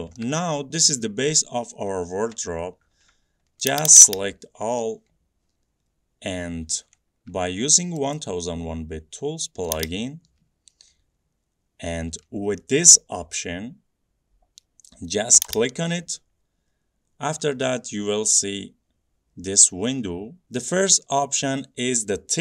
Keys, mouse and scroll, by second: 0.3 middle click, 0.5 middle click, 0.6 middle click, 3.8 click, 4.0 click, 4.2 click, 4.6 middle click, 4.7 middle click, 5.6 scroll down 3, 6.8 middle click, 7.0 scroll up 2, 7.3-7.7 scroll, 8.2 right click, 9.9 click, 15.5 click, 16.7 click, 17.2-20.5 drag.